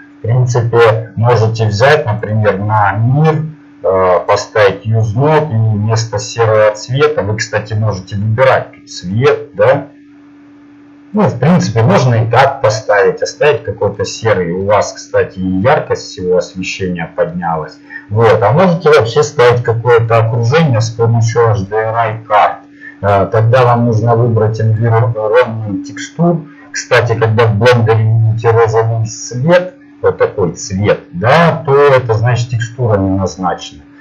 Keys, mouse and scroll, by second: 2.2-4.4 drag.